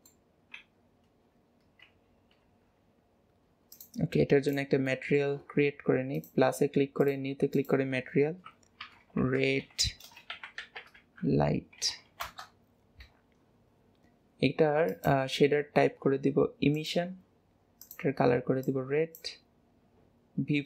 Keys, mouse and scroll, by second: 0.1 middle click, 0.4 scroll down 1, 0.4 scroll up 1, 0.5-0.8 scroll down 1, 0.9-1.2 scroll up 1, 3.8 click, 4.6 click, 5.0-6.2 middle drag, 6.2-11.1 drag, 15.0-18.0 drag.